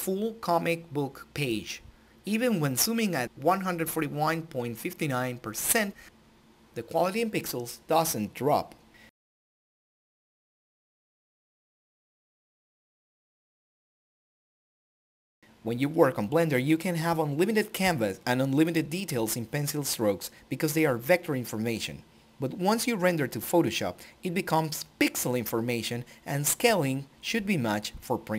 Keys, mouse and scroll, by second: 0.3 click, 2.5 z, 3.1 click, 5.7 click, 5.7 alt+click, 7.1 alt+click, 10.2 ctrl+alt+i, 14.2 click, 19.6-22.0 drag.